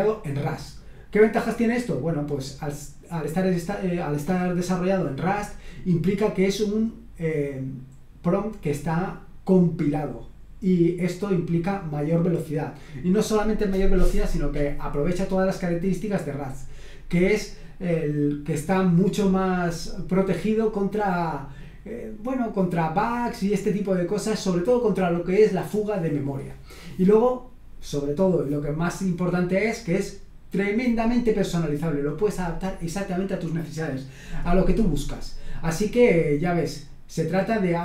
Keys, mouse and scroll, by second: 35.7-36.6 scroll down 2, 36.6-37.4 scroll down 1.